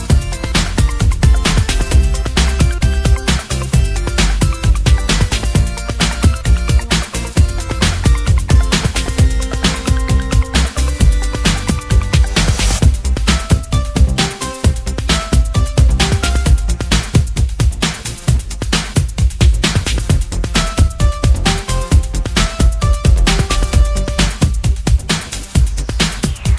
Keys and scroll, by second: 4.6 BackSpace, 16.4 BackSpace, 20.9 BackSpace, 21.4 BackSpace, 21.5-22.2 BackSpace.